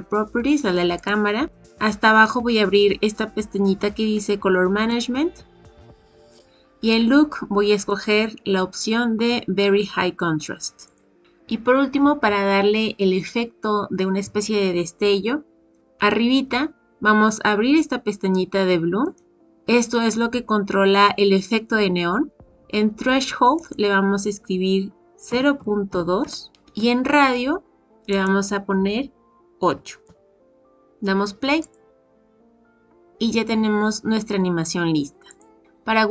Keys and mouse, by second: 0.9 click, 4.8 click, 7.8-11.0 drag, 19.0 click, 23.5-26.5 drag, 28.1-30.3 drag, 31.6 click, 35.3 click.